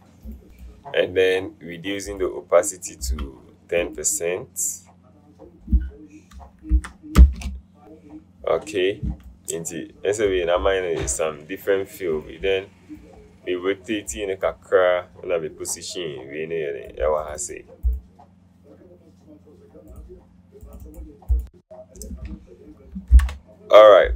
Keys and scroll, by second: 6.9 BackSpace, 7.3 Return, 7.4 KP_Decimal, 23.2 ctrl+0.